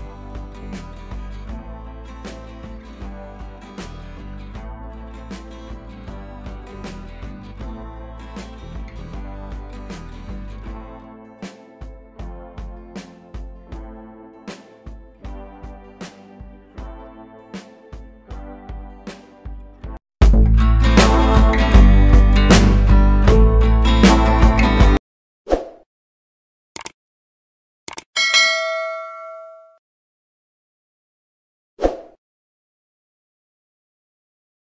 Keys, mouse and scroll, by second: 0.1 scroll down 1, 0.9 click, 1.7 right click, 2.3 click, 3.5 right click, 4.1 click, 6.0-6.3 scroll down 1, 6.3-6.9 scroll up 1, 6.9 click, 8.8 right click, 9.1 click, 10.7 right click, 11.7 click, 12.8 right click, 13.4 click, 14.6 ctrl+z, 14.9-17.2 drag, 17.2 right click, 18.5-19.1 typing, 19.1 click.